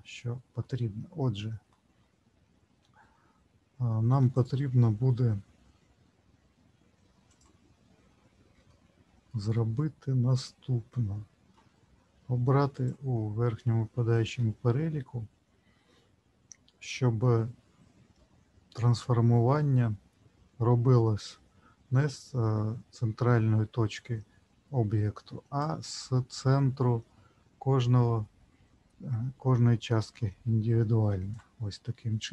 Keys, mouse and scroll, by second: 1.1 ctrl+z, 1.7 ctrl+z, 4.3 shift+click, 7.3 click, 8.7 shift+middle click, 9.5 middle click, 12.7 click, 25.6 click.